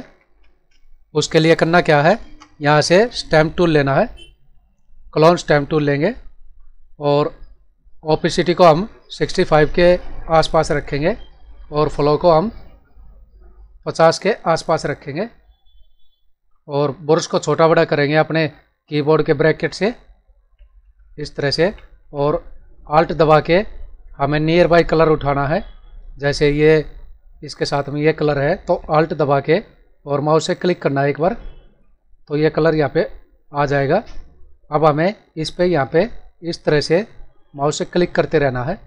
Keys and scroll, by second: 0.6 space.